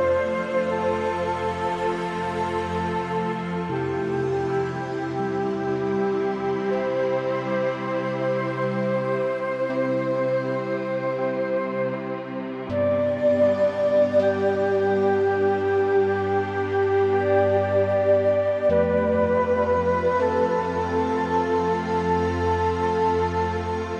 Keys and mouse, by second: 2.8 o, 3.1 g, 3.8 z, 8.0 Escape, 8.6 click, 11.8 click, 12.3 shift+click, 12.9 shift+click, 14.1 b, 15.6 ctrl+b, 15.8 v, 19.8 i, 21.2 click, 21.9 middle click, 22.3 click, 23.0 1, 23.3 click, 23.8 click.